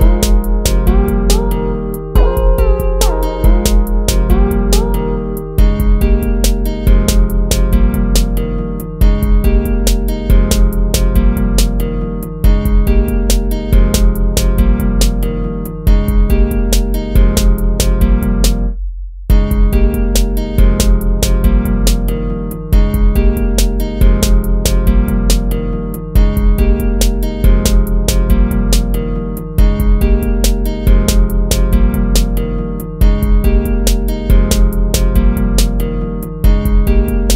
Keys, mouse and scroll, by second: 4.5 ctrl+z, 5.2 ctrl+z, 6.5 ctrl+-, 8.1 ctrl+z, 8.6 ctrl+-, 11.2 ctrl+-, 12.6 ctrl+z, 14.3 ctrl+-, 16.2 ctrl+-, 22.0 ctrl+-, 23.4 ctrl+-, 32.3 right click, 33.8 ctrl++, 36.8 ctrl+z.